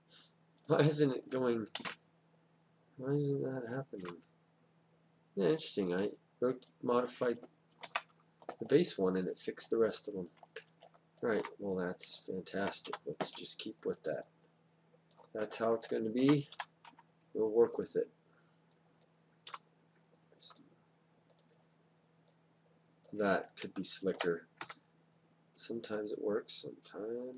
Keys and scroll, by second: 1.7 Down, 4.0 Down, 7.8 ctrl+z, 12.9 w, 16.5 e, 19.5 Down, 24.6 Down.